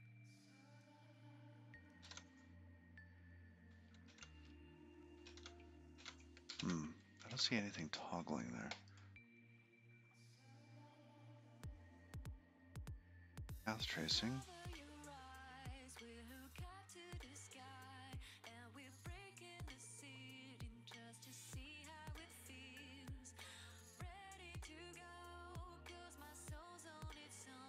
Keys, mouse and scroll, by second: 0.1 click, 2.9 ctrl+b, 5.8 Escape, 6.2 ctrl+b, 6.9 ctrl+b, 7.5 ctrl+b, 8.3 ctrl+b, 10.5-10.8 scroll down 3, 11.5-12.0 scroll down 7, 12.3-13.0 scroll up 4, 13.0-13.9 scroll up 15, 14.2 click, 15.5 click, 16.0 click, 16.4 click, 18.5 click, 20.0 click, 21.0-22.8 scroll down 17, 22.8-23.2 scroll down 6, 26.5-26.8 scroll down 3.